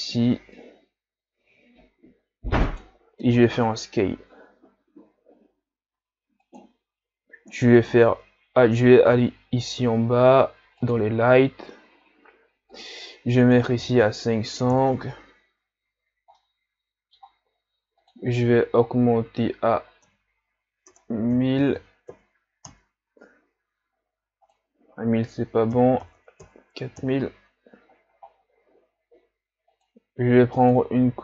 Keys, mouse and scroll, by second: 3.3 s, 14.8 KP_0, 16.5-22.7 middle drag, 22.7 KP_0, 30.6 click.